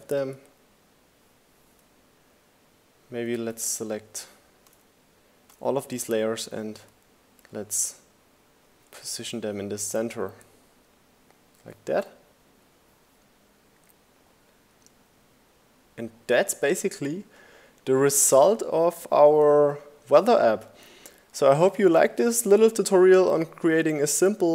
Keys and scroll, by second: 3.4 Left, 6.0 Left, 7.0 Left.